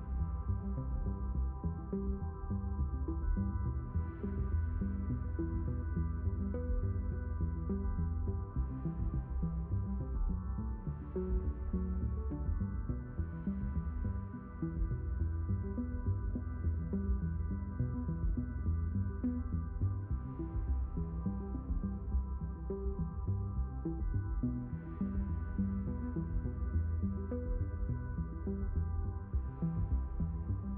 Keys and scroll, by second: 22.7 4, 23.2 Return, 26.2 3, 26.5 0, 26.8 Return.